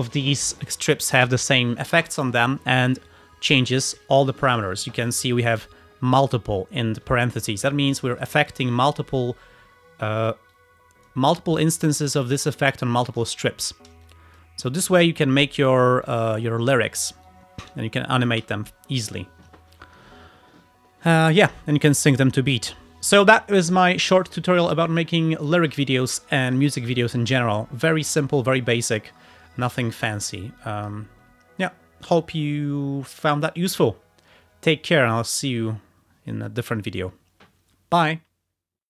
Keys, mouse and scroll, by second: 2.3 click, 8.2 click, 10.3 click, 10.6 click, 13.2 click, 13.5 ctrl+scroll down 2, 14.1 ctrl+alt+click, 14.7 alt+click, 15.7 alt+click, 16.1 click, 17.3-18.5 ctrl+drag, 18.5 Delete, 21.6-21.9 ctrl+scroll up 2, 22.5-23.1 ctrl+scroll down 4, 30.7 click.